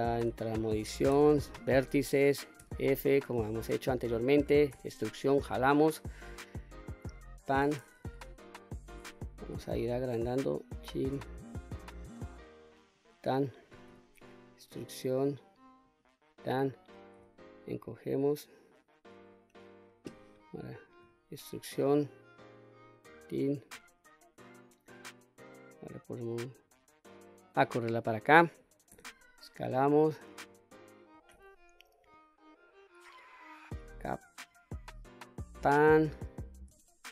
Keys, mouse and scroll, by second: 0.6 1, 2.1 f, 2.7 middle click, 4.2 e, 6.6 click, 7.6 KP_3, 9.0 s, 12.5 click, 13.4 e, 15.3 click, 16.7 s, 18.6 click, 20.5 e, 22.4 click, 27.0-28.1 drag, 28.4 s, 29.7 click, 30.8 e, 34.7 click, 36.1 s.